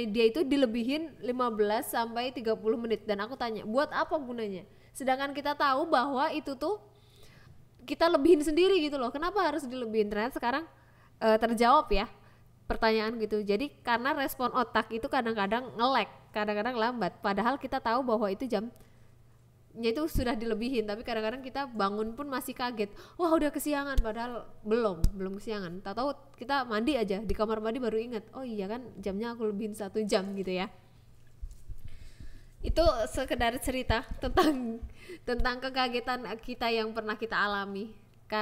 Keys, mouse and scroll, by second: 0.3 g, 0.7 click, 0.9 right click, 1.7 g, 1.9 click, 2.3 shift+d, 2.7 click, 3.0 s, 3.6 click, 4.1 shift+d, 4.6 click, 5.4 click, 5.8 s, 6.2 click, 6.8 shift+d, 7.9 click, 8.2 shift+d, 9.2 click, 9.5 d, 9.9 s, 10.7 click, 12.0 g, 13.7 click, 16.4 click, 16.9 g, 17.4 click.